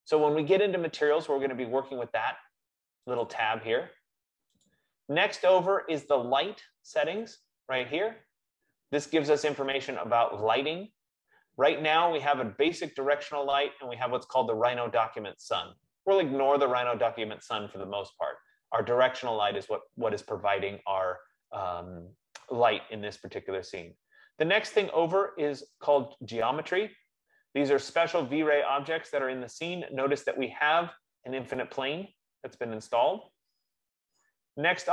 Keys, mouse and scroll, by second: 3.4 click, 5.0 click, 6.5 click, 7.6 click, 15.1 F15, 26.5-31.2 drag.